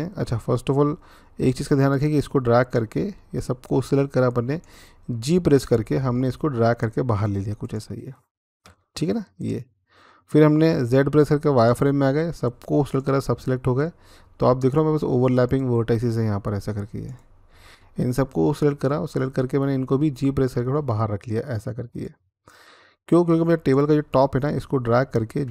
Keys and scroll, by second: 5.8 g, 10.7-11.4 z, 20.4 g.